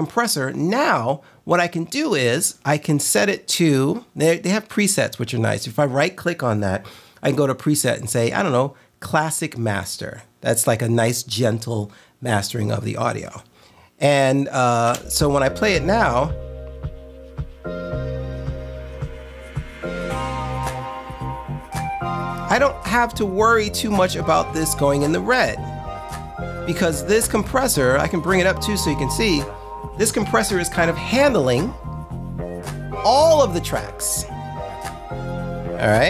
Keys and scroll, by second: 15.0 space.